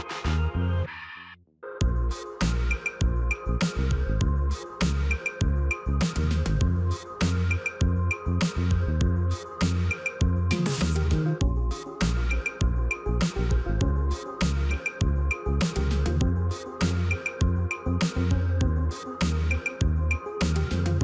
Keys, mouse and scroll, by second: 13.6 right click.